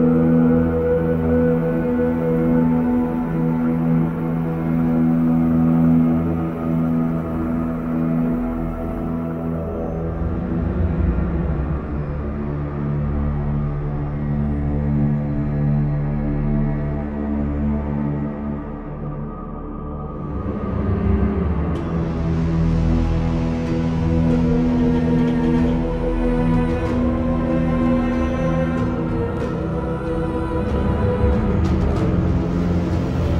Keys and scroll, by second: 2.3 ctrl+e, 13.4 ctrl+e, 18.2 ctrl+i, 18.5-19.1 typing, 19.6 ctrl+z, 23.1 v, 23.5 ctrl+t, 24.5 ctrl+t, 24.5 ctrl+d.